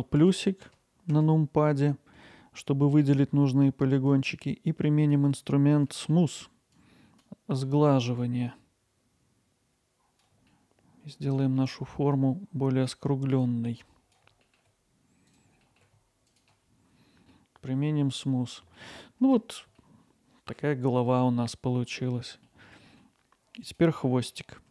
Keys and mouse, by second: 0.2 ctrl+KP_Add, 0.7 ctrl+KP_Add, 4.1-5.8 drag, 8.3-10.3 drag, 13.4 click, 15.1 ctrl+KP_Add, 15.6 ctrl+KP_Add, 16.3 click, 19.3 Tab.